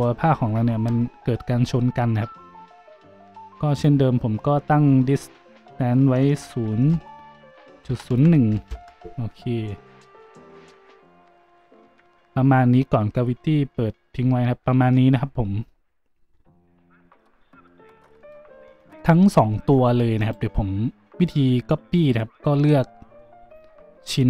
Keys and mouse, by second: 3.8-19.0 drag, 20.1 middle click.